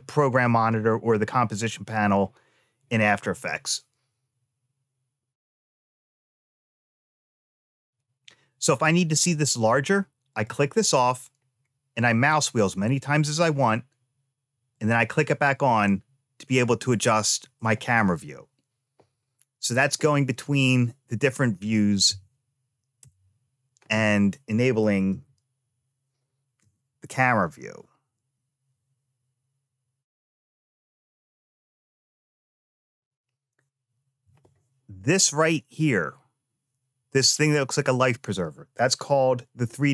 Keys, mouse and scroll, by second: 10.1 click, 11.4-11.9 scroll up 1, 11.9-13.1 scroll up 1, 14.5 click, 15.5-17.4 middle drag, 22.8 v, 24.9 n.